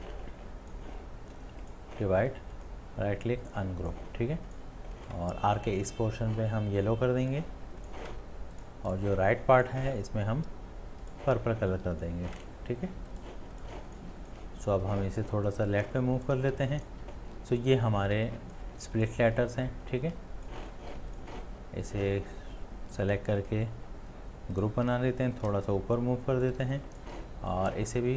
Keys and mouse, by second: 2.6 shift+click, 13.7 ctrl+alt+space, 16.0 shift+click, 16.2 shift+click, 18.1 space, 18.8 ctrl+space, 19.5 click, 19.6 click, 19.7 click, 19.9-20.5 space, 20.9 space, 23.4 right click, 25.6 right click, 25.8-26.4 shift+click, 25.9 shift+click, 26.0 shift+click, 26.0 shift+click, 26.6 shift+space, 27.1 space.